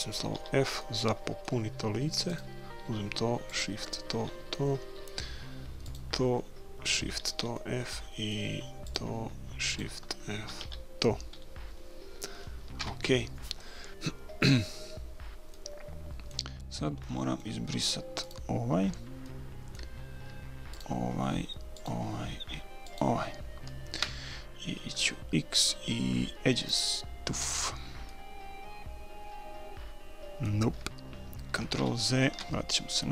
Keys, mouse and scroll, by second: 0.4 f, 0.9-2.6 middle drag, 2.3-5.4 right drag, 4.2 f, 4.6 middle click, 4.9 click, 5.4 middle click, 5.9 click, 5.9-7.6 right drag, 7.5 f, 7.9-11.7 right drag, 10.6 f, 11.8-13.8 middle drag, 12.8 KP_1, 15.5 middle click, 18.2 middle click, 18.3 click, 18.4 right click, 19.3 middle click, 20.8 click, 20.8-24.8 right drag, 25.0 x, 28.1-29.9 middle drag, 30.0 click, 31.8 ctrl+z.